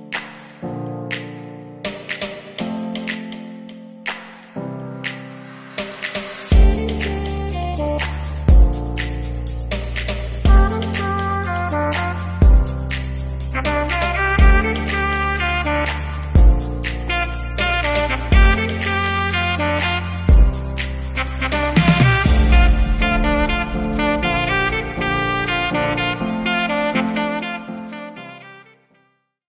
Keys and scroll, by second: 1.6 ctrl+f.